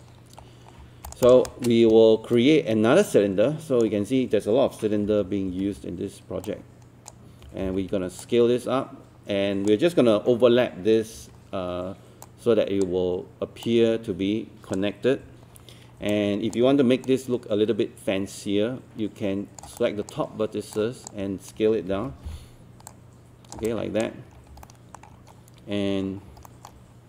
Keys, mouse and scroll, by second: 0.0 click, 0.4 scroll up 1, 1.1 click, 1.5-4.2 shift+right drag, 4.8-6.0 typing, 6.4 click, 7.4 typing, 8.2 click, 11.2 w, 12.2-15.2 drag, 16.1 alt+click, 17.1-19.7 right drag, 19.8 alt+click, 21.9 alt+e, 22.9 click, 23.7 alt+click, 24.4 scroll up 1, 24.6 alt+middle click, 25.2-25.7 scroll up 1, 25.8 scroll down 1, 26.1 scroll up 1, 26.5 alt+middle click.